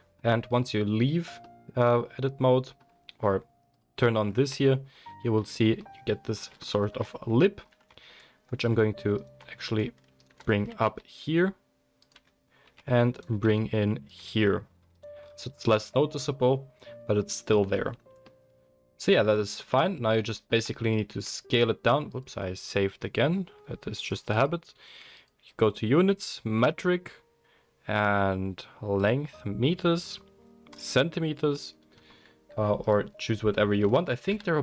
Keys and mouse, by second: 3.7 click, 3.8-9.1 middle drag, 4.5 Tab, 4.9 Tab, 7.9 Tab, 9.1 alt+click, 9.2 alt+middle click, 10.5 g, 12.1-13.1 middle drag, 12.1 Tab, 12.6 Tab, 13.1 alt+click, 13.2 alt+middle click, 13.4 s, 14.1 Tab, 14.1-14.9 middle drag, 14.9 click, 15.0-19.2 middle drag, 21.1 ctrl+s, 22.1-24.0 middle drag, 24.0 click, 24.5-25.2 middle drag, 25.2-34.4 drag, 32.8 middle click, 32.8 right click, 34.3 n.